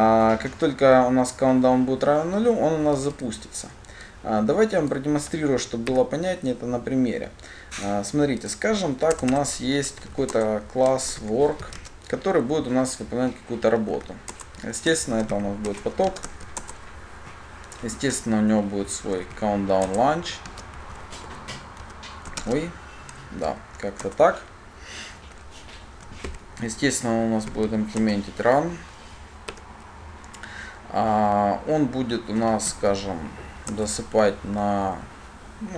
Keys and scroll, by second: 10.6 Return, 20.3 Return, 23.1 Return, 23.2 ctrl+space, 28.2 ctrl+o, 33.9 Return.